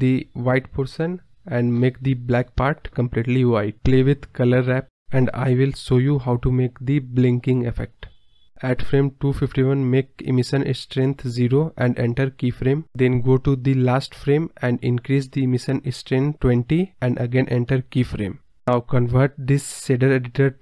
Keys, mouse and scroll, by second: 0.2-0.7 drag, 1.5-3.3 drag, 3.9 scroll down 3, 6.2-7.2 drag, 8.7 scroll down 5, 8.9 scroll up 2, 9.6-10.7 drag, 11.7 Right, 13.1 click, 13.8-14.3 right drag, 14.3-16.4 drag, 16.4 right click, 16.9-17.6 drag.